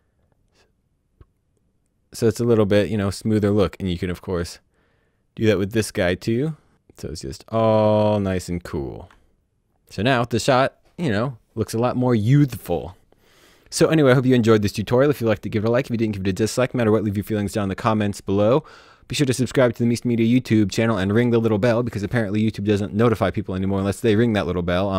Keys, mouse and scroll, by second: 5.3 click, 7.0 click, 7.6-8.0 ctrl+scroll down 3, 8.5 click, 8.6 scroll up 2, 8.9 click, 9.7 space, 9.7 click, 9.8 space.